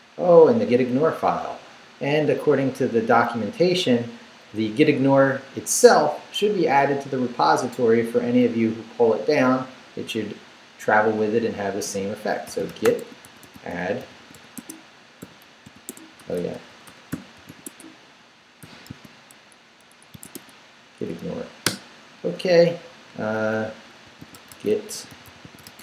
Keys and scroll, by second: 12.2-18.6 typing, 15.9 Tab, 20.3 shift+Tab, 21.2 Tab, 21.6 Return, 23.8-25.8 typing.